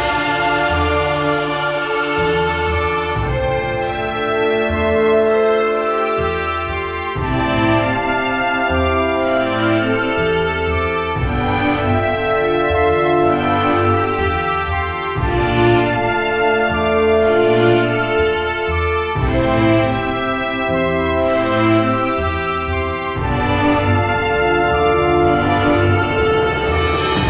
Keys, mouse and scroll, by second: 0.8 alt+middle click, 1.0-1.7 scroll, 1.9 click, 2.4 click, 3.1 ctrl+h, 4.2 alt+scroll, 4.7 click, 6.1 click, 6.6 ctrl+z, 7.1 ctrl+z, 7.2 ctrl+z, 7.5 ctrl+z, 7.8 ctrl+z, 7.9 ctrl+z, 8.2 ctrl+z, 9.0 alt+middle click, 9.3 alt+scroll, 9.9 click, 10.2-11.1 typing, 11.8 scroll, 12.1 alt+middle click, 12.7 ctrl+h, 13.3 middle click, 13.5-14.0 scroll, 14.5 ctrl+j, 15.6 ctrl+j, 16.0 ctrl+j, 16.4 scroll, 16.8 alt+middle click, 18.8 alt+middle click, 20.8 click, 22.4 alt+middle click, 23.4 ctrl+z, 23.7 alt+scroll, 24.4 alt+scroll, 25.5 click, 26.5 shift+click.